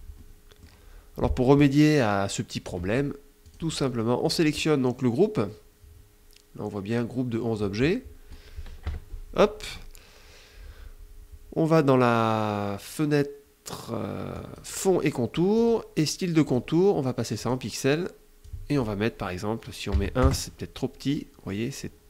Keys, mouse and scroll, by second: 2.9 click, 3.7 click, 8.3 KP_Subtract, 13.7 click, 14.9 click, 15.9 click, 16.8 click, 17.8 click, 19.3 KP_1, 19.6 KP_Enter.